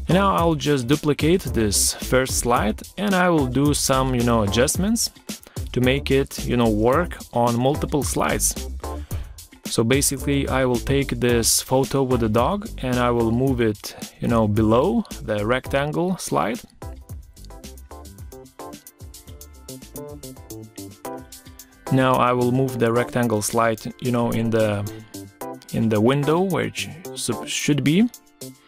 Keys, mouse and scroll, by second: 7.4 shift+click, 8.6 ctrl+g, 10.1 shift+click, 11.0 ctrl+g, 12.3 ctrl+g, 12.4 ctrl+scroll down 1, 14.0 shift+click, 18.7 ctrl+scroll down 1, 19.4 ctrl+scroll up 1, 19.9 ctrl+a, 22.1 shift+click, 27.1 Escape, 28.2 ctrl+scroll up 1.